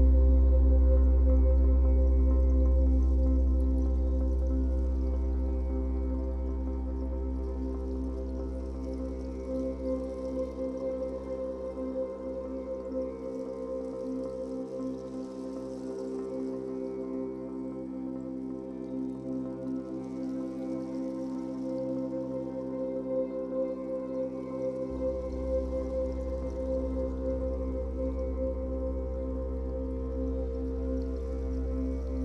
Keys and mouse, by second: 1.6 v, 1.8 click, 2.7 t, 3.0 click, 3.4 click, 4.3 Return, 4.5 click, 8.5 Return, 10.6 click, 12.0 Return, 12.1-14.0 typing, 20.5 click, 23.1-23.7 typing, 26.5 space, 26.7 click, 26.8 space, 28.6 v, 29.0 click, 30.2 click, 31.0 right click.